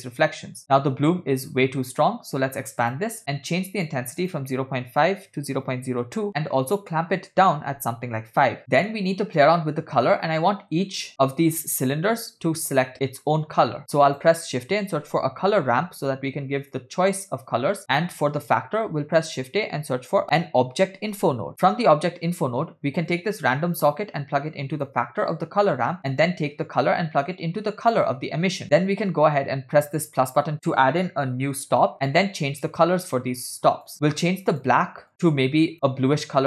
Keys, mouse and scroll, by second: 2.9 drag, 3.7-6.2 drag, 6.7-8.5 drag, 8.6 middle click, 8.6 scroll down 4, 13.9 shift+a, 17.9 middle click, 18.9 shift+a, 20.4 BackSpace, 23.1-25.1 drag, 26.0 click, 26.8-28.4 drag, 28.8 middle click, 28.8 scroll up 1, 30.0-30.5 drag, 33.7 click, 34.6 drag.